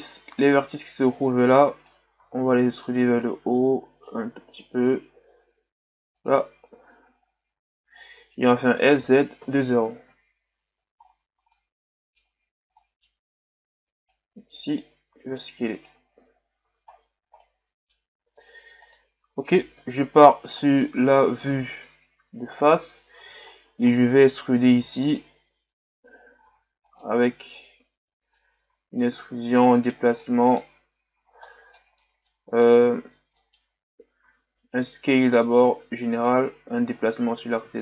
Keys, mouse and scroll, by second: 0.3-2.2 drag, 2.2 e, 3.2-4.4 drag, 4.4 s, 6.7 Tab, 7.7-8.0 scroll up 4, 8.0 Tab, 8.8 s, 11.0-11.5 scroll down 3, 11.5-13.2 middle drag, 13.2-14.1 scroll up 2, 14.1 click, 14.9 s, 16.2 Tab, 16.6 a, 16.9-17.4 scroll down 4, 17.4-18.2 middle drag, 18.2-18.8 scroll down 4, 18.8 right click, 19.7 KP_1, 20.6-23.5 shift+scroll down 3, 23.5 shift+scroll down 2, 23.9-24.2 scroll up 4, 24.2 Tab, 25.1 alt+right click, 26.5 e, 27.6-28.7 drag, 28.7 s, 29.9 scroll down 4, 30.2-33.0 middle drag, 33.0 ctrl+z, 33.3 middle click, 34.2 s, 36.7-37.8 drag.